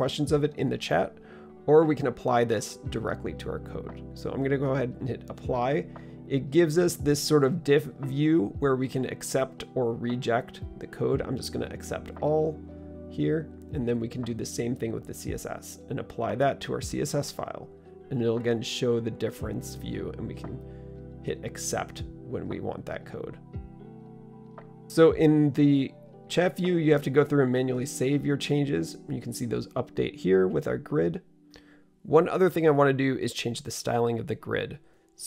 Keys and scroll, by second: 26.0 super+s, 26.8 super+s.